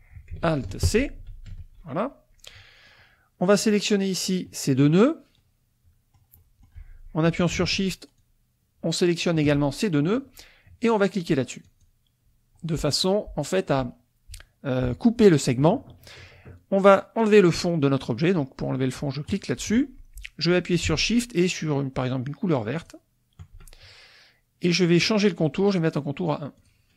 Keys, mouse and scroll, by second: 1.3 ctrl+alt+c, 2.5 click, 3.6 click, 5.4-6.8 middle drag, 8.2-9.4 shift+drag, 11.7 click, 19.4 click, 22.9 shift+click, 25.4 right click, 26.6 click.